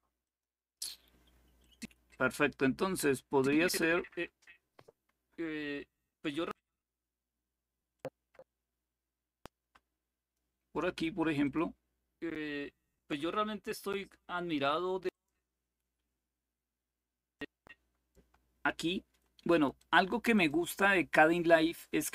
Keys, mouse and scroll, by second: 0.0 click, 1.3 click, 3.1 click, 6.3 click, 7.7-10.1 drag, 11.2 click, 14.8 click, 15.6 click, 17.1-18.7 drag, 19.2-21.0 drag.